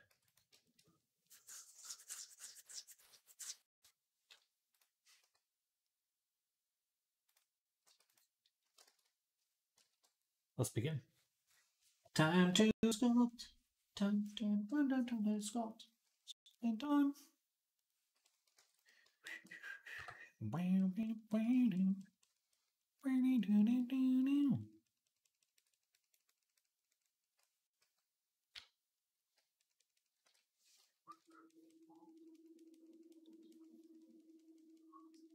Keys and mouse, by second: 0.4-9.7 drag, 7.8 x, 8.7 ctrl+z, 9.7 KP_3, 18.4 ctrl+Tab, 19.1 click, 19.1-20.6 shift+middle drag, 19.8 j, 20.6-35.3 drag, 28.4-29.2 ], 30.0 [, 31.0 alt+q.